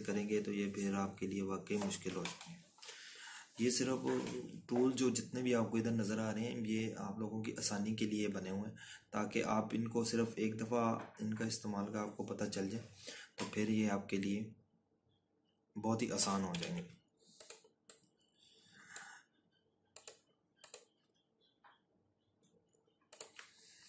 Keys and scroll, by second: 19.3 ctrl+-.